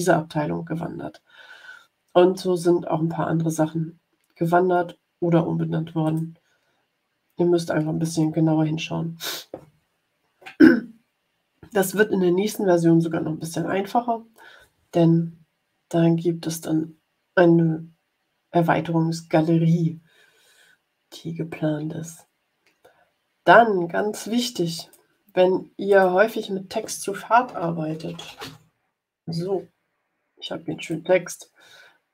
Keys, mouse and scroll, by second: 6.0 click, 24.7 click, 25.8 click, 27.8-29.0 typing, 30.8 click, 32.0-32.1 drag.